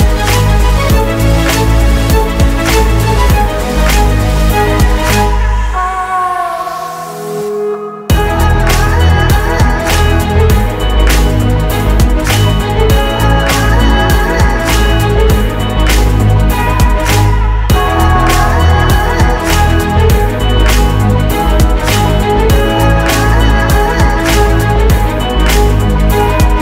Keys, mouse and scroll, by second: 0.7 typing, 8.4-9.9 typing, 10.5 Return, 11.8 ctrl+shift+c, 11.9-13.7 typing, 12.2 ctrl+shift+c, 12.4 Return, 12.6 ctrl+shift+c, 12.8 Return, 13.1 ctrl+shift+c, 13.6 ctrl+shift+c, 14.0 Return, 14.0 ctrl+shift+c, 14.2 Return, 15.4 alt+scroll up 1, 17.8 typing.